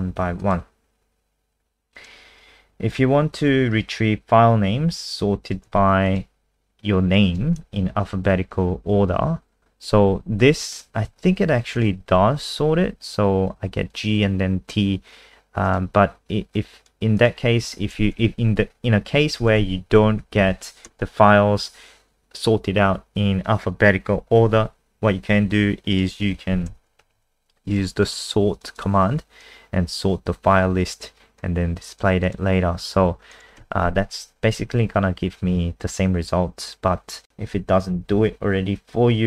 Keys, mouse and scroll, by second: 2.8-3.9 scroll down 1, 3.9 click, 5.6 ctrl+c, 6.1 click, 9.8 ctrl+z, 10.7 click, 11.0 ctrl+s, 11.7 click, 12.0 F5, 15.6 click, 19.7 shift+Home, 20.0 shift+Up, 20.1 shift+Up, 20.3 shift+Up, 20.5 shift+Up, 24.3 ctrl+v, 25.9 click, 26.5 ctrl+Home, 26.7 shift+End, 27.0 Delete, 28.5 click, 28.7 click, 29.4 click, 33.6 ctrl+s, 33.8 F5, 37.2 click.